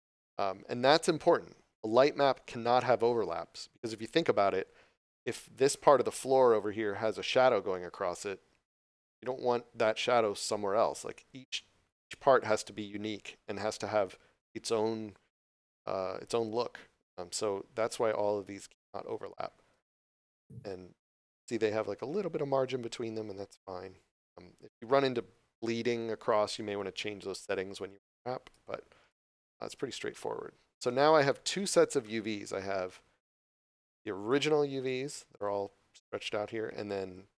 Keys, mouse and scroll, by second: 20.5 scroll up 1, 23.4 scroll down 1, 26.4 scroll up 1, 30.4 scroll down 1, 30.8 middle click, 31.3 scroll down 1, 31.6 Tab, 32.0 middle click, 34.2 click, 34.7 scroll down 1.